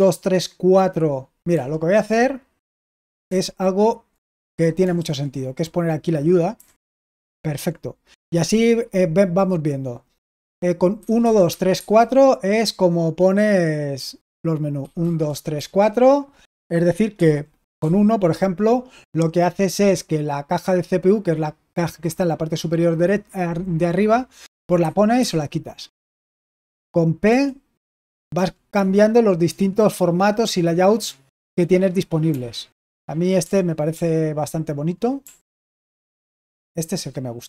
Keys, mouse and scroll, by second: 4.3 Escape, 4.9 super+h, 6.4 h, 7.2 super+l, 10.6-12.2 typing, 14.7-15.9 typing, 17.7 typing, 25.1 typing, 27.2-28.7 typing, 32.2 typing, 33.3-33.8 typing, 35.1 typing, 36.2 typing.